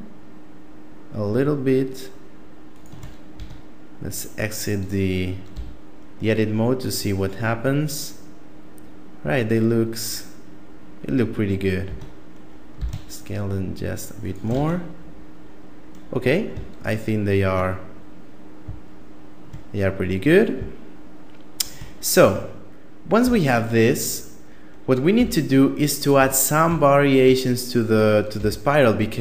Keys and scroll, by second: 3.2 Tab, 5.3 a, 11.7 Tab, 12.5 s, 14.3 Tab, 21.9 Tab, 23.0 a, 24.9 a, 25.9 Tab, 28.1 KP_7.